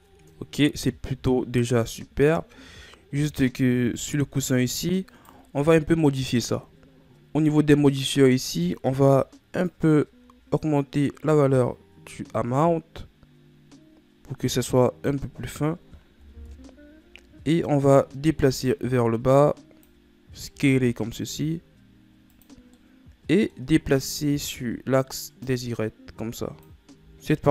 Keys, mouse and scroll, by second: 0.4-2.8 middle drag, 2.8-3.5 scroll down 2, 3.5-4.7 scroll up 3, 4.7-5.7 scroll down 3, 5.7 right click, 8.6-13.2 drag, 16.9 KP_1, 19.3-21.1 drag, 21.1 s, 23.3-24.3 middle drag, 24.3 scroll down 4, 24.7-26.0 middle drag, 26.0-27.5 drag.